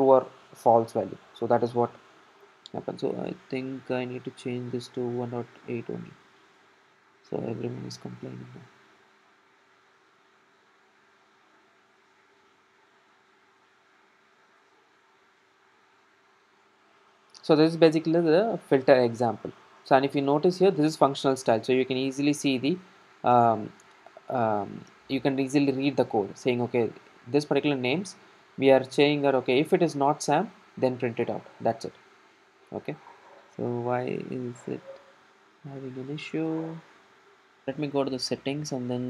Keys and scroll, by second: 13.9 ctrl+alt+super+;, 16.1 ctrl+r.